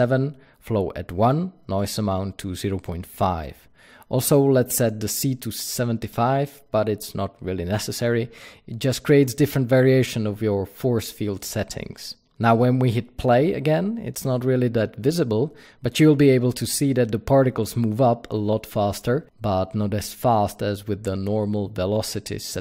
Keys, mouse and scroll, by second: 7.0 KP_Enter, 7.0 click, 11.8 click, 20.2 drag.